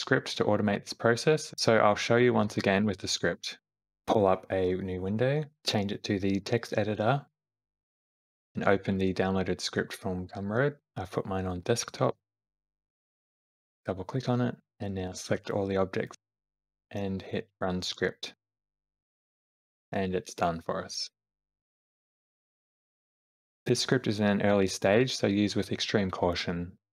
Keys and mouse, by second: 3.4 space, 4.8-6.5 drag, 7.8 click, 15.3 click, 21.5 space.